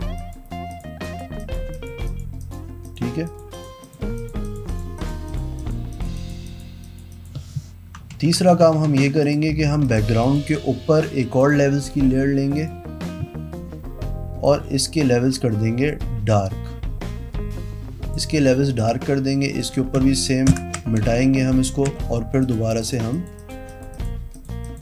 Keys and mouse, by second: 0.0 click, 0.4 click, 0.9 click, 1.2 click, 1.6 click, 1.9 click, 2.3 click, 3.1 click, 3.5 click, 3.7 click, 4.1 click, 4.4 click, 7.2 click, 7.4 click, 8.3 ctrl+d, 9.4 click, 10.1 click, 10.4 click, 11.6 click, 12.8 click, 14.6 click, 19.0 click, 19.8 click, 20.7 alt+BackSpace, 22.1 e, 22.6 click, 23.0 click, 23.3 click, 23.6 click.